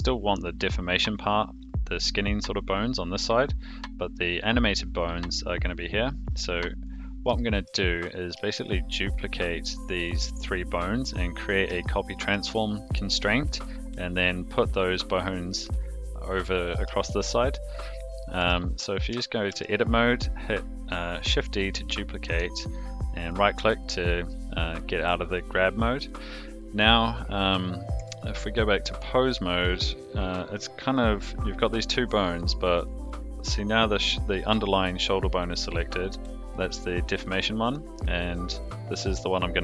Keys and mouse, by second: 0.3 click, 4.3 click, 6.8 click, 7.3-7.6 shift+middle drag, 8.1 click, 8.6 shift+drag, 9.4 shift+click, 11.8-12.3 shift+middle drag, 17.2-17.5 shift+middle drag, 18.4 Tab, 19.5 shift+d, 26.8 click, 28.0 Tab, 29.7 click, 32.2 click, 37.6 click.